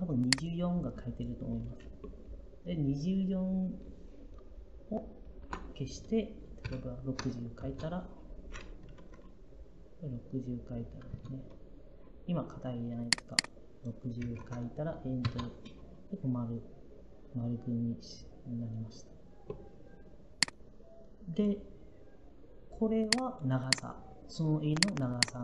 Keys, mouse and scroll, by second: 5.3 BackSpace, 6.5-7.1 typing, 7.5 Return, 10.9 Return, 13.8-14.8 typing, 15.1 Return.